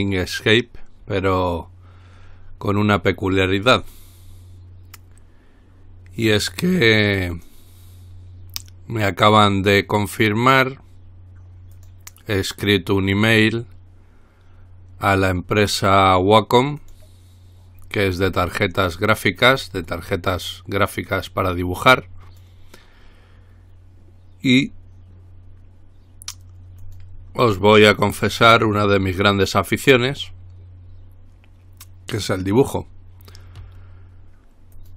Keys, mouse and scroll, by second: 3.9 click, 7.6 click, 11.9 click, 17.0 click, 19.7-20.3 scroll down 2, 20.3 scroll down 1, 21.5-23.1 drag, 27.0 click, 27.9-28.6 scroll up 2, 29.0-30.0 scroll up 2.